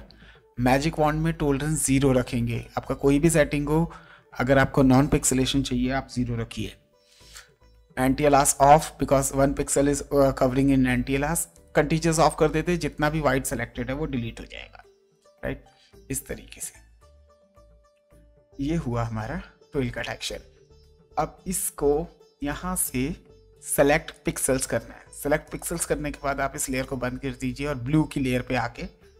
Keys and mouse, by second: 0.9 click, 2.2 click, 6.3 KP_0, 8.1 click, 11.5 click, 12.8 click, 14.6 Delete, 15.7 ctrl+d, 19.2 space, 22.4 right click, 24.1 click, 25.4 click, 26.7 click.